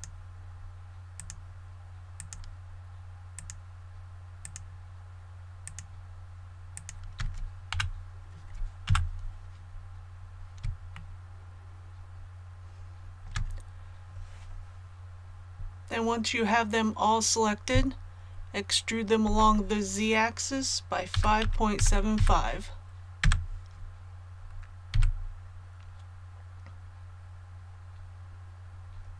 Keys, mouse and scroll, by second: 1.1 shift+right click, 2.1 shift+right click, 3.3 shift+right click, 4.4 shift+right click, 5.6 shift+right click, 6.7 shift+right click, 7.7 KP_1, 8.8 KP_3, 9.6 scroll down 1, 10.9-13.2 shift+middle drag, 12.7 scroll up 1, 19.2 e, 21.1 KP_5, 21.4 KP_Decimal, 21.8 KP_7, 22.1 KP_5, 24.9 a.